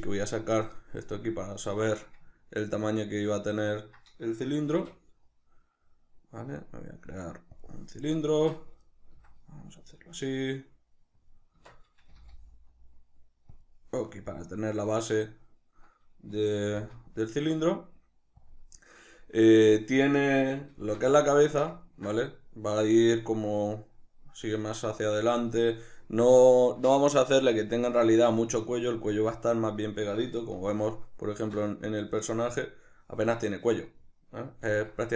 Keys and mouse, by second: 0.2 click, 2.5 ctrl+middle click, 4.8 shift+a, 8.4 Tab, 9.2 s, 11.3 click, 11.5 Tab, 12.1 g, 13.7 click, 16.7 g, 18.5 click, 20.8 alt+q, 21.5-30.6 shift+middle drag, 30.6 alt+q, 31.7 middle click, 34.7 alt+q.